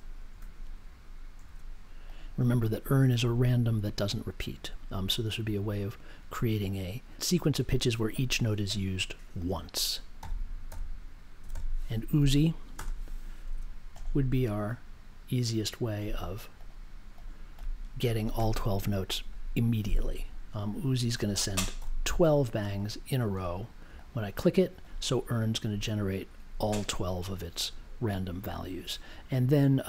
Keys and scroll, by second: 0.2 space, 1.3 1, 10.2 n, 11.5 i, 12.7 space, 13.4 1, 14.6 2, 21.7 b.